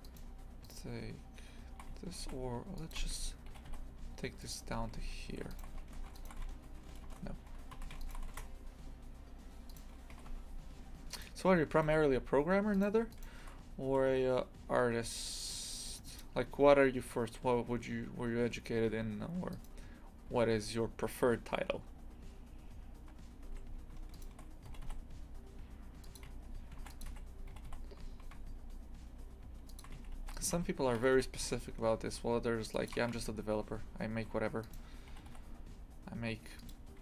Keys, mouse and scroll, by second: 0.0 shift+right click, 1.8 a, 2.2 ctrl+r, 3.5 g, 5.5 alt+shift+right click, 5.8 ctrl+x, 6.1 alt+shift+right click, 6.4 ctrl+x, 7.7 a, 8.0 alt+shift+right click, 8.3 ctrl+x, 9.6 right click, 10.1 g, 11.8 1, 12.7 right click, 13.1 shift+right click, 13.9 g, 19.5 right click, 20.3 g, 24.1 shift+right click, 24.7 g, 26.7 ctrl+r, 27.5 g, 30.1 ctrl+r, 31.0 g, 33.6 2, 34.6 right click, 35.2 g.